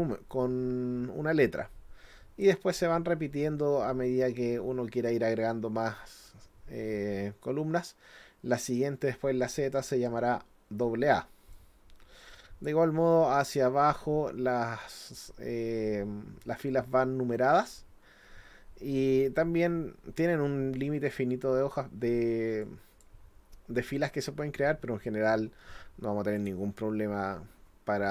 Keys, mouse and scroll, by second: 5.1-6.2 drag, 11.5-12.6 drag, 13.4-14.4 scroll down 3, 14.7-15.0 scroll up 1, 15.5-15.8 scroll up 1, 16.1-16.7 scroll up 4, 16.7-17.7 scroll down 6, 19.1-19.4 scroll up 2, 19.5-19.8 scroll down 2, 20.3-21.0 scroll up 3, 22.6 click, 24.6 scroll down 1, 25.0-25.7 scroll up 2, 26.4 click.